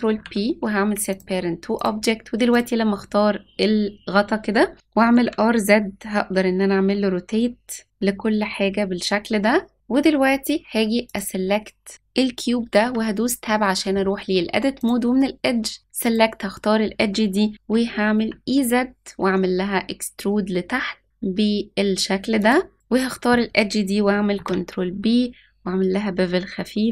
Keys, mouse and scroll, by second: 0.1 ctrl+p, 1.7 click, 2.5 click, 4.9 r, 11.0 click, 12.8 Tab, 14.7-16.1 drag, 17.7 e, 22.7 click, 24.3 ctrl+b.